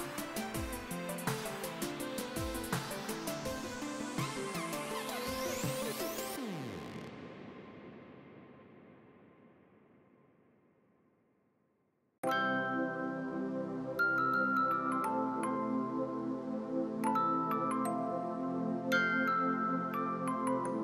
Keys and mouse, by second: 0.1 s, 0.5 click, 1.5 click, 2.6 s, 3.0 click, 6.0 click, 8.3 click, 9.2 Escape, 9.3 click, 11.8 right click, 12.2 click, 15.3 Escape, 16.1 click, 16.8 KP_2, 16.9 Return, 17.2 KP_5, 17.4 Return, 17.7 click, 18.3 ctrl+click.